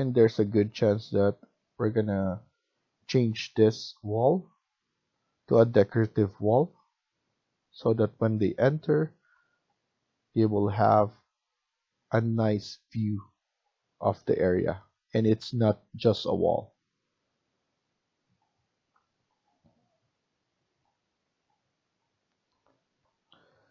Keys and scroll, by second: 22.9 F1.